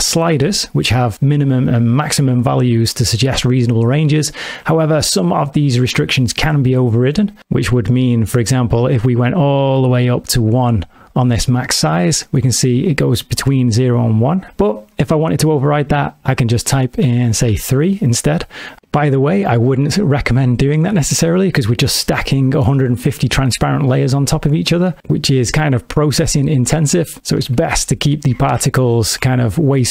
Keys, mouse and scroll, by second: 7.4 space, 9.0 click, 12.2 click, 14.6 click, 26.9 click, 29.7 click.